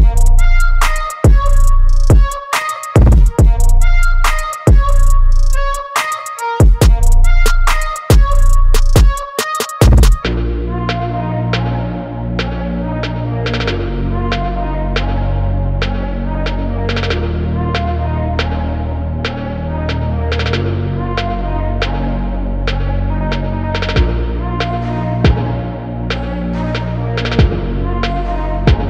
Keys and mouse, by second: 0.1 click.